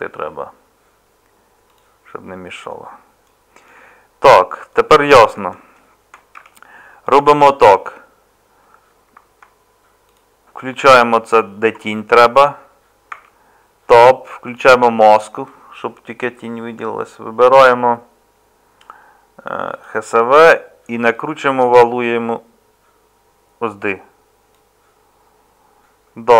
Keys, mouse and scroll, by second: 6.4 Tab, 13.1 Tab.